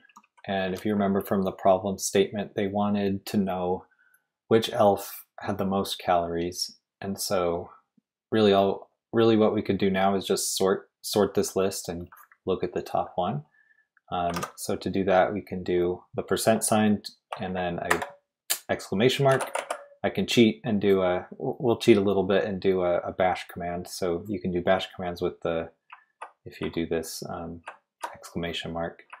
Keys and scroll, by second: 0.1-0.7 typing, 14.3 shift+;, 16.1 typing, 17.9 shift+1, 19.0-20.0 typing, 25.9 Left, 25.9-28.1 typing, 29.0 Right, 29.1 Left.